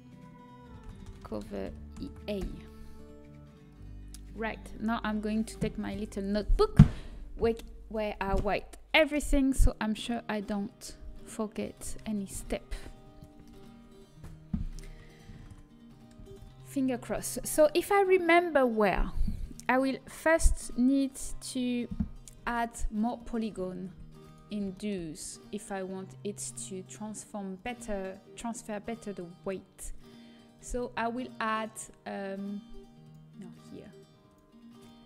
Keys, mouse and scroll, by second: 15.4 ctrl+s, 16.2 ctrl+s, 22.8-26.1 right drag, 23.1-26.1 drag, 26.1-28.6 middle drag, 27.5-32.4 drag, 27.5-28.6 right drag, 33.0-35.0 drag.